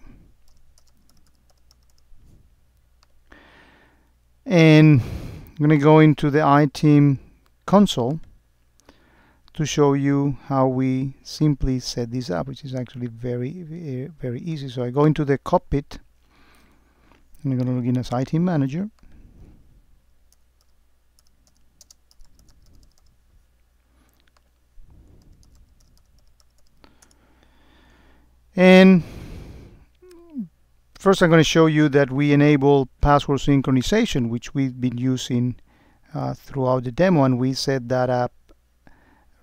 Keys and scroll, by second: 22.1 space, 27.1 Return.